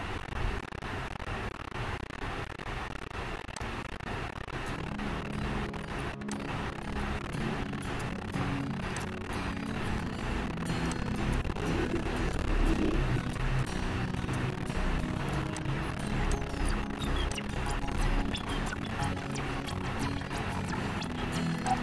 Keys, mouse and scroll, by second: 3.9 click, 6.6 click, 9.2 click, 11.5 click, 13.6 shift+click, 15.9 click, 16.6 click, 17.6 click.